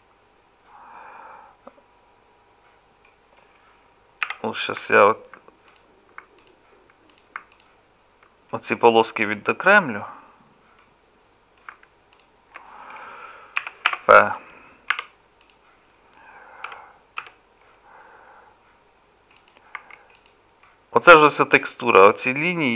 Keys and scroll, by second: 4.3 3, 13.6 p, 14.9 Tab, 16.7 KP_Divide, 17.2 KP_Divide, 19.8 Tab.